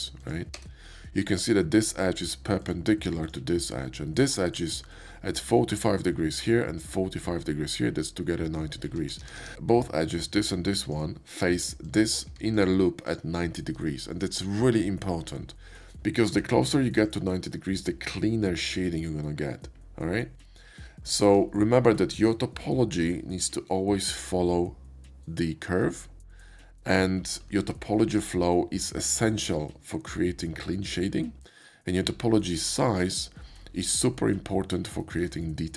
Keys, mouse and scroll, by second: 0.6 space, 1.7 click, 1.7 space, 2.6 click, 3.2 ctrl+click, 9.3 ctrl+z, 9.5 ctrl+z, 10.2 click, 10.8 click, 11.8 click, 12.5 alt+click, 13.1-14.4 alt+drag, 16.6 Tab, 17.0 click, 18.8 Tab, 20.4 scroll up 1, 21.0 shift+middle click, 27.7 Tab, 28.1 click.